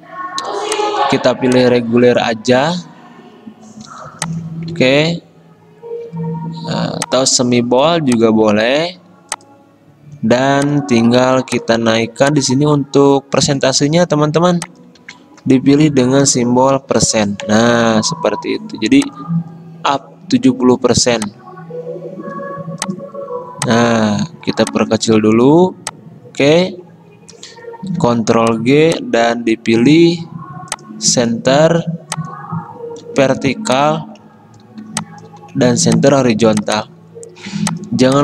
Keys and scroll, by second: 3.9 t, 4.8 ctrl+a, 14.3 t, 15.1 ctrl+a, 16.8 %, 28.1 ctrl+g, 33.3 ctrl+g, 35.9 ctrl+g.